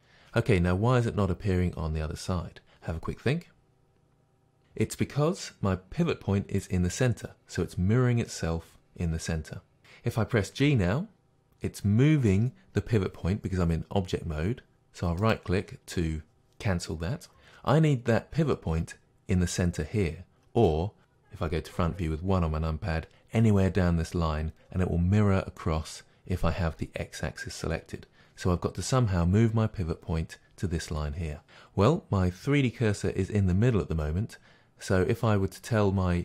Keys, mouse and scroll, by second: 10.6 g, 15.3 right click, 20.7-36.2 middle drag, 21.8 KP_1.